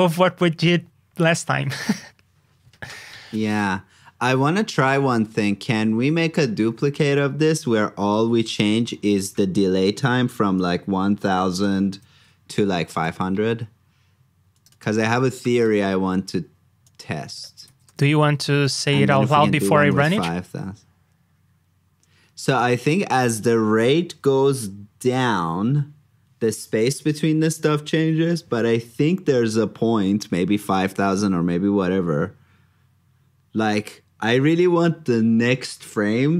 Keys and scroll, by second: 8.0 super+j, 11.8 alt+shift+Down, 17.6 super+c, 17.8 super+j.